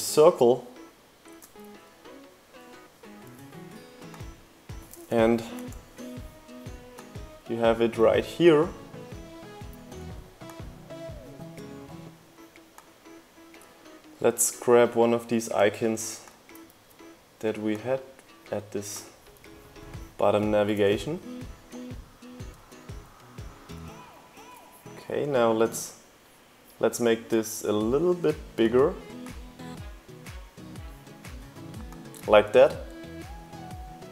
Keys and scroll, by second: 2.8-3.8 typing, 17.7 super+v, 19.1 shift+Up, 19.4 shift+Left, 21.7 shift+Left, 22.0 shift+Up, 22.1 shift+Left, 22.4 shift+Left.